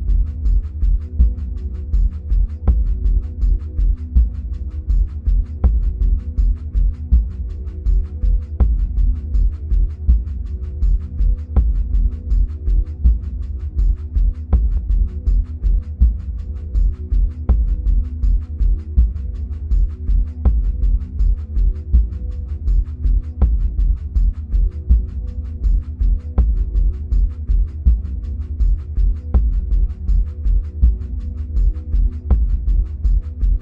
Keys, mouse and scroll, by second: 3.3-12.4 middle drag, 4.5-5.2 scroll down 2, 5.2-6.9 scroll up 2, 6.9-9.6 scroll up 1, 12.4-13.2 scroll down 2, 13.2-14.0 scroll up 2, 14.0-17.8 scroll up 1, 17.8 middle click, 17.8 scroll up 1, 18.3 click, 24.1 click, 28.4 click, 33.4 click.